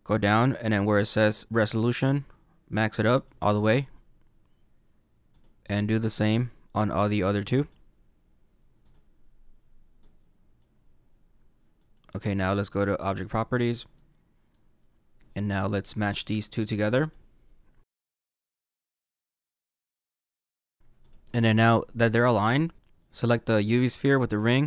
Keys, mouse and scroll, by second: 2.1 click, 5.2 click, 6.8 click, 8.7 click, 9.9 click, 11.7 click, 13.7 scroll down 1, 13.9 middle click, 14.7-15.5 scroll up 2, 15.5 click, 16.0 middle click, 16.9 click, 18.0-20.6 typing, 18.0 shift+middle click, 18.2 scroll up 2, 18.3 shift+middle click, 18.9 scroll up 1, 18.9 middle click, 19.8 middle click, 19.8 scroll down 1, 19.9 middle click, 20.3 middle click, 20.7 middle click, 20.9 click, 23.0 click.